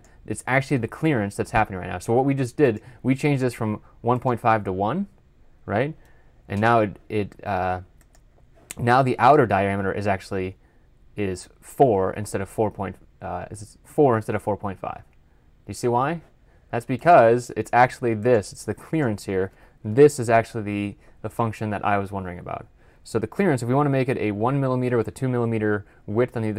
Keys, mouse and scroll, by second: 15.3-17.3 scroll up 1, 18.1-20.1 scroll up 1.